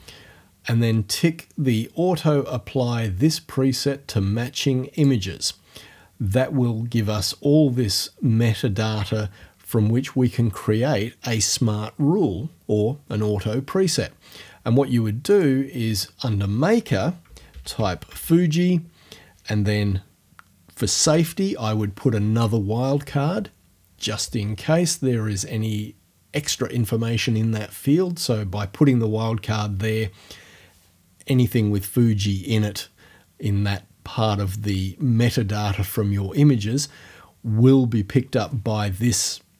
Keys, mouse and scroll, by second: 5.0 click, 15.3 click, 17.0-18.6 typing, 21.0 shift+5.